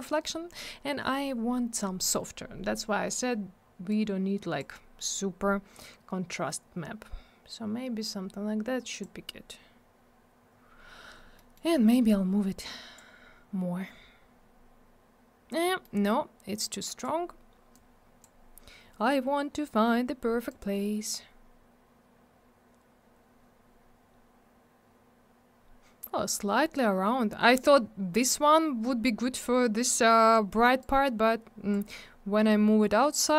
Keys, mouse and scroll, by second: 3.9 click, 8.0 click, 11.3 middle click, 11.5 middle click, 12.0 click, 15.6 middle click, 15.8 middle click, 16.6 click, 17.7 click, 20.5 click, 23.8-26.2 scroll up 1, 30.8 click.